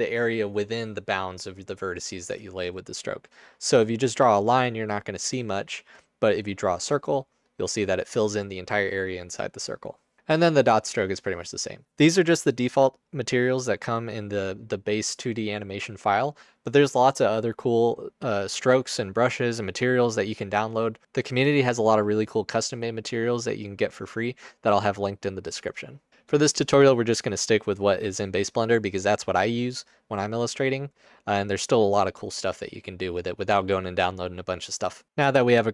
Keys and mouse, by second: 7.4 click.